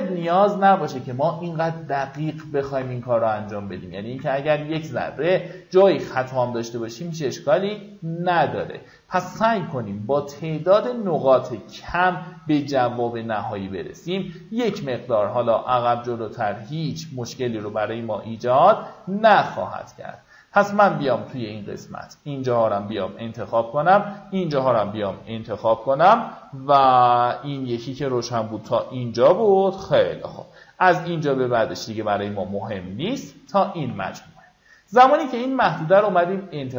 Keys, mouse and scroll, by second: 1.5 click, 6.0-10.9 drag, 11.9-23.4 drag, 23.6 alt+scroll down 1, 26.5 click, 32.9 right click, 34.3 click, 35.4-35.7 alt+scroll down 1, 36.4 alt+scroll up 1.